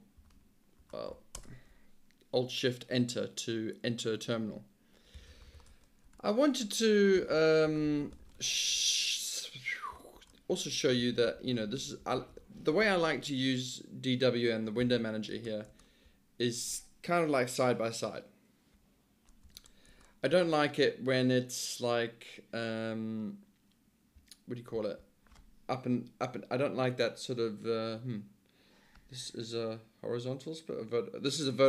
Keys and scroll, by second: 0.0-0.9 typing, 1.4 alt+shift+Return, 4.9-8.7 typing, 8.8 Return, 10.2 alt+shift+Return, 11.4 alt+h, 11.6 alt+h, 11.8 alt+h, 12.0 alt+l, 12.2 alt+h, 12.3 alt+l, 12.4 alt+h, 14.9 Return, 15.7 alt+Return, 19.6 alt+Return, 19.9 alt+Return, 24.8 alt+d.